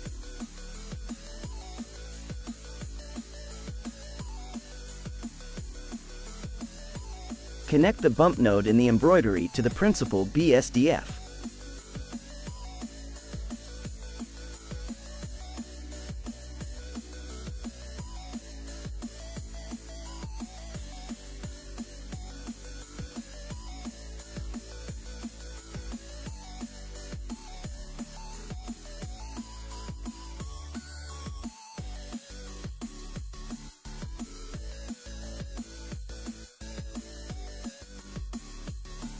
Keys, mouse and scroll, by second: 0.4-1.1 scroll up 1, 1.1-1.7 scroll down 5, 1.7-3.0 scroll up 8, 3.0-4.2 scroll down 2, 4.2-5.0 middle drag, 5.0 scroll up 3, 5.6-6.4 scroll down 1, 6.4 middle click, 6.9-8.5 scroll up 2, 8.5 drag, 13.7-14.3 middle drag, 14.3-15.9 scroll up 4, 15.9-16.7 scroll up 2, 16.7-18.3 scroll up 1, 18.3 middle click, 18.6-21.2 scroll up 7, 21.2-22.2 scroll up 1, 22.4-25.3 drag, 25.7-26.6 scroll down 1, 26.6 scroll down 5, 26.7-28.4 middle drag, 28.4 click, 29.6 click, 30.1 click, 30.6-31.9 scroll down 3, 31.9 scroll down 4, 32.1 click, 33.7 g, 36.8 click, 38.1-38.7 middle drag, 38.7 click.